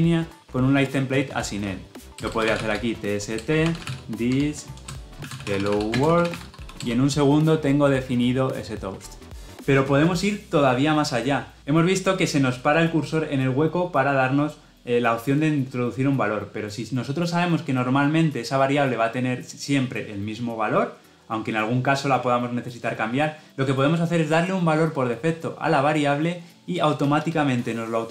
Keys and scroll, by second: 3.2 Return.